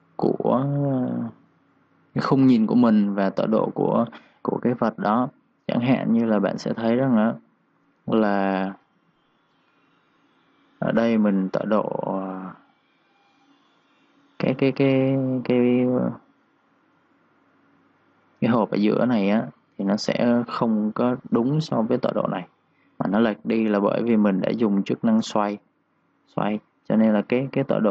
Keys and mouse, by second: 0.7 3, 0.8 click, 1.3 3, 2.3 click, 4.5 click, 5.3-9.6 typing, 5.4 click, 6.5 click, 7.2 click, 7.7 click, 13.0 click, 13.3-14.6 typing, 14.7 click, 16.9 3, 17.0 click, 17.4 3, 17.6 click, 24.2 r, 25.0 click, 27.0 9.